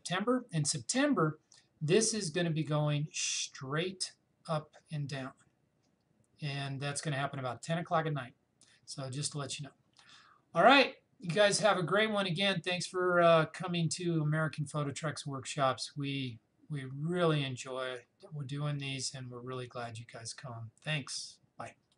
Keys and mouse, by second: 21.9 click.